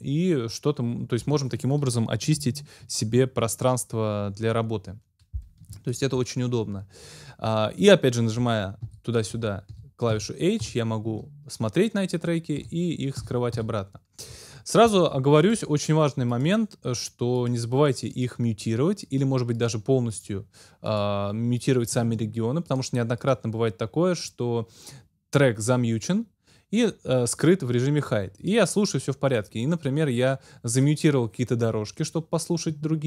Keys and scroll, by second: 8.9 h, 12.6 h.